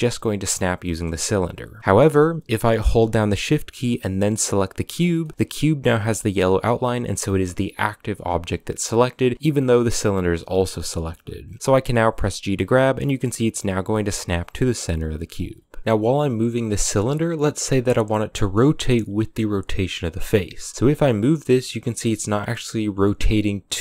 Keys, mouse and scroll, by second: 1.8 middle drag, 2.1 scroll up 1, 2.2-4.6 middle drag, 4.6-5.0 shift+right drag, 5.0 shift+middle click, 5.2 scroll up 2, 10.3 scroll down 1, 10.5-11.6 middle drag, 11.6 g, 20.6 middle click, 20.7 g.